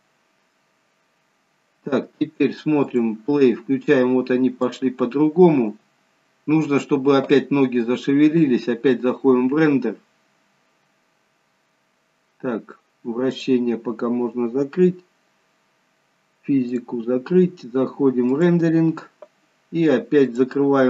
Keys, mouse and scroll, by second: 3.0 click, 4.8 click, 6.0-6.5 scroll down 4, 7.5-7.9 scroll down 1, 9.0-10.4 scroll down 1, 10.4-11.4 scroll up 1, 11.4-12.1 scroll up 2, 13.6 click, 17.1 click, 18.7 click, 20.5 click.